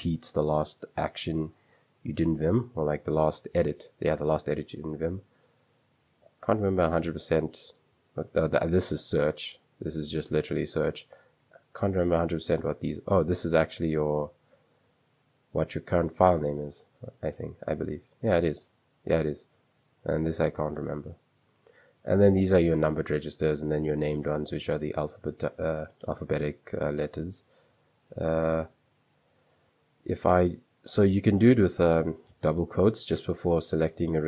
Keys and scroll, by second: 29.9 Escape, 30.9 j, 31.3 k, 33.5-34.2 typing.